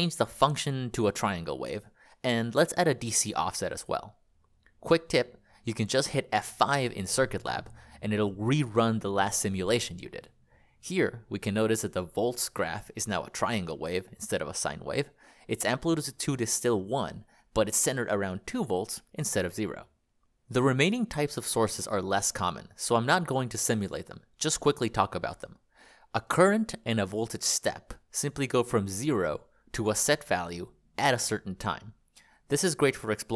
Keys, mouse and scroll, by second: 4.2 BackSpace, 4.3 BackSpace, 5.4 Return, 6.3 F5, 21.3 click, 22.4 click, 22.6 click, 26.4 click, 29.9 click, 31.2 click.